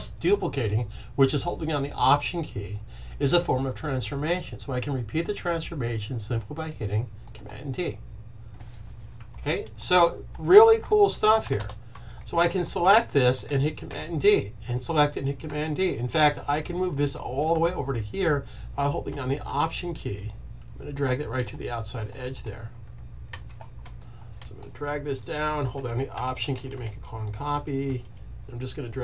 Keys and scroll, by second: 13.8 super+d, 15.4 super+d, 23.2 super+z.